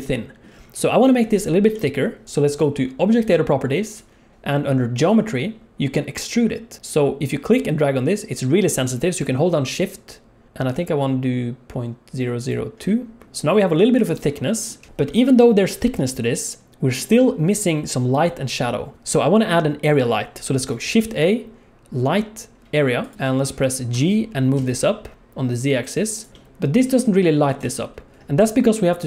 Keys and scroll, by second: 14.9 alt+a, 18.9 shift+a, 20.8 shift+a, 23.9 g.